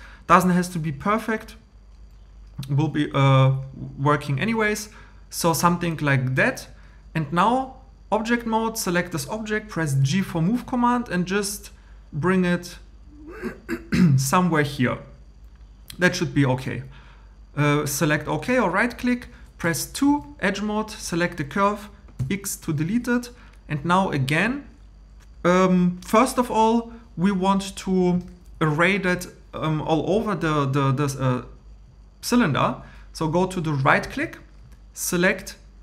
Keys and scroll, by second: 10.0 g, 19.4-20.6 typing, 22.2 x.